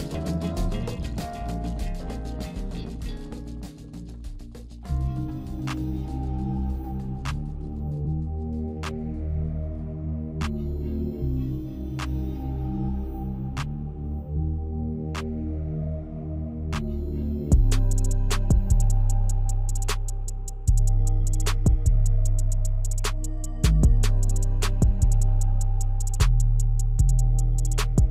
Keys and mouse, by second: 3.0 r, 4.6 KP_7, 5.8 g, 8.5 middle click, 9.7 g, 10.4 middle click, 13.3 click, 14.0 g, 16.5 ctrl+z, 17.1 click, 18.1 KP_0, 19.7-21.5 drag, 20.4 KP_0.